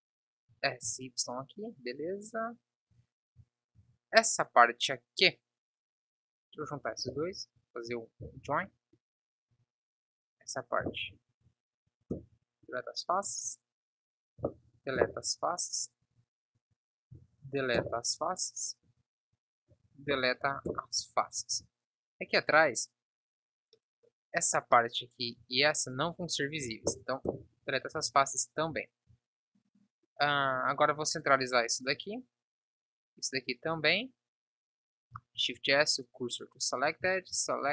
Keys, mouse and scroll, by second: 0.8 s, 3.2 z, 3.7 Tab, 4.1 z, 7.4 ctrl+j, 7.9 Tab, 8.5 ctrl+j, 8.9 Tab, 9.8 b, 11.1 Delete, 13.6 b, 14.7 Delete, 16.4 b, 17.4 Delete, 19.2 b, 20.4 Delete, 21.9 Tab, 27.0 Delete, 28.1 Tab, 28.2 z, 35.7 shift+s.